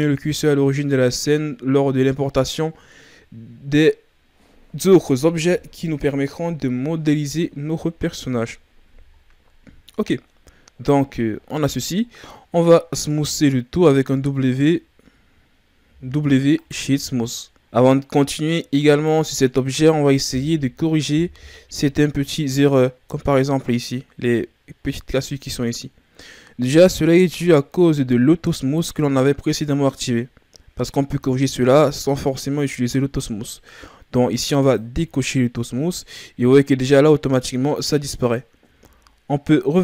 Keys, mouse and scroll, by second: 0.4-3.5 ctrl+scroll up 4, 7.5-9.2 shift+scroll down 4, 9.2-10.5 ctrl+scroll up 1, 10.6-11.3 ctrl+scroll up 1, 11.3-12.0 scroll up 5, 12.0-14.0 shift+scroll down 3, 14.0 x, 15.8 w, 17.7-18.9 scroll up 1, 18.9 right click, 34.6 click, 38.7 Tab.